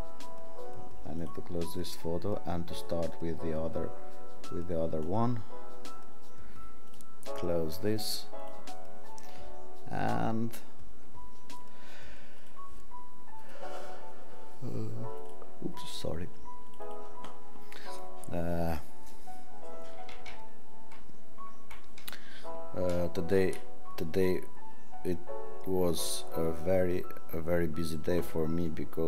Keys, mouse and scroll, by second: 8.4 click, 16.6 click, 24.2 click.